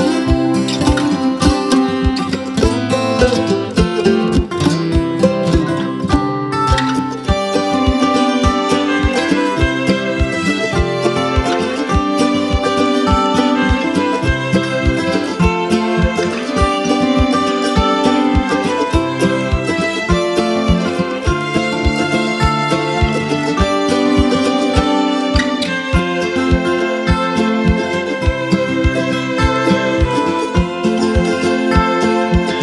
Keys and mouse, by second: 0.6 space, 0.7-1.3 click, 1.1 space, 2.4-3.0 click, 2.7 space, 3.4-4.6 drag, 5.1 ctrl+alt+z, 5.9-8.4 drag, 9.1-11.9 alt+drag, 12.8 space, 13.0-13.6 click, 13.3 space, 19.0 space, 19.1-19.7 click, 19.5 space, 21.1-22.3 drag, 23.5 space, 23.6-24.2 click, 24.0 space, 24.9-28.0 drag, 29.7 space, 29.8-30.4 click, 30.2 space, 31.7-32.6 drag.